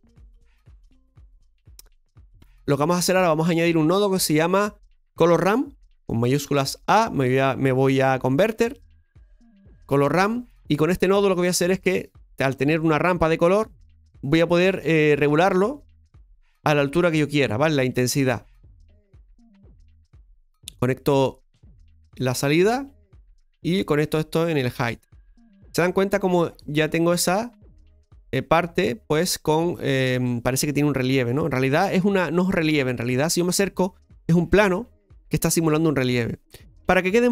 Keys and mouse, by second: 0.1-2.4 middle drag, 2.5-5.2 drag, 15.2-17.3 drag, 18.6-20.2 drag, 22.4-24.1 drag, 26.5-29.1 middle drag, 30.4-37.3 middle drag.